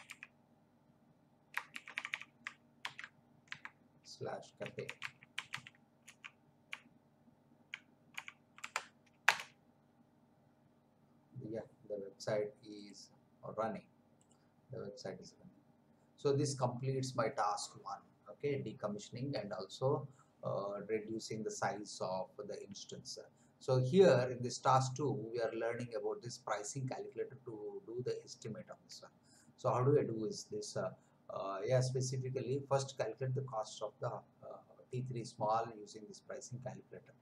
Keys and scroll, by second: 0.0-0.1 typing, 1.7 shift+;, 1.9 /, 2.8 ctrl+v, 3.4-6.0 typing, 6.0 Left, 8.5 Delete, 9.2 Return.